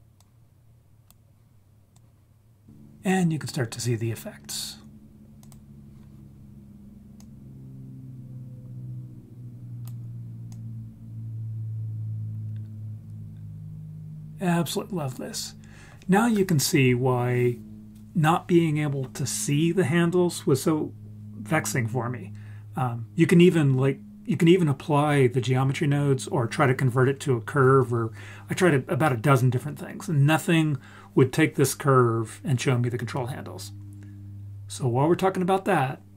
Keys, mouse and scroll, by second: 0.1-1.1 drag, 1.9-2.6 drag, 4.4 scroll up 2, 5.4 click, 7.2-9.9 drag, 10.5-15.1 drag.